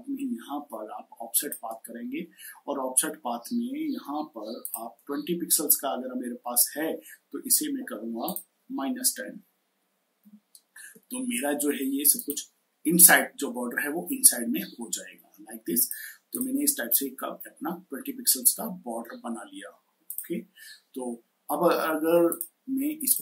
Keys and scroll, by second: 10.0 typing.